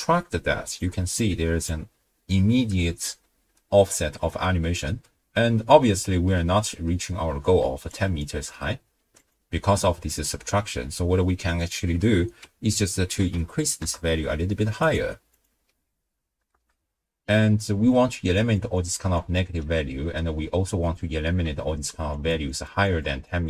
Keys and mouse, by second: 1.1 alt+click, 2.3-3.1 drag, 4.0 click, 4.0 right click, 4.9 shift+space, 5.4 space, 6.7 space, 7.6 d, 8.2 d, 8.3 d, 9.4 d, 11.6-13.8 drag, 14.8 click, 16.5 shift+space, 17.7-19.5 typing, 17.9 click, 18.3 click, 19.1 click, 20.8 click, 21.4-23.4 typing, 22.1 click, 22.5 click, 23.3 click.